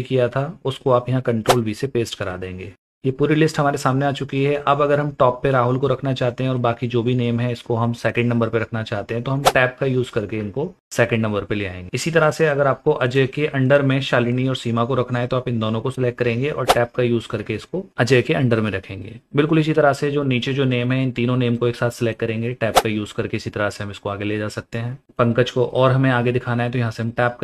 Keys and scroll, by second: 1.5 v, 9.6 Tab, 17.4 Tab, 22.7 Tab.